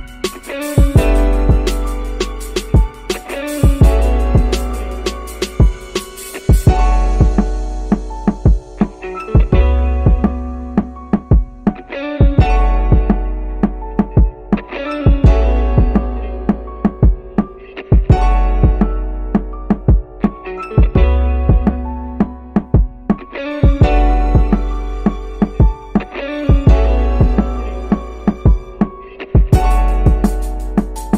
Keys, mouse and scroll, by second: 0.0 middle click, 1.7 middle click, 3.2 s, 5.9 middle click, 7.1-9.2 middle drag, 9.9 s, 15.9-24.0 drag.